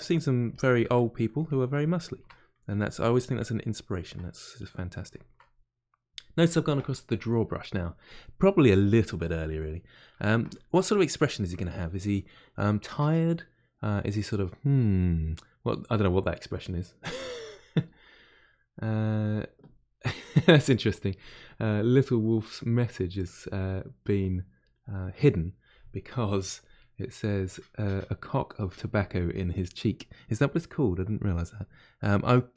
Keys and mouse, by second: 0.5 ctrl+click, 0.9 middle click, 1.4 ctrl+click, 2.3 middle click, 2.7 shift+click, 3.4-32.5 middle drag.